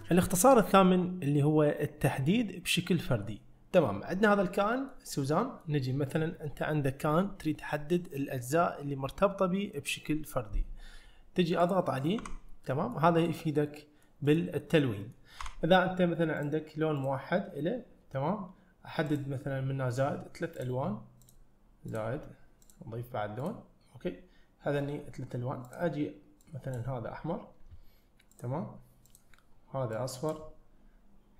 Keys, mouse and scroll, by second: 4.6 middle click, 5.5 middle click, 11.6 click, 12.2 Tab, 12.8 middle click, 13.3 click, 13.8 middle click, 14.3 click, 15.1 middle click, 15.5 Tab, 16.4 drag, 17.0 click, 19.1 click, 20.6 drag, 21.3 click, 21.9 click, 22.7 click, 23.4 click, 25.7 click, 28.4-31.3 drag.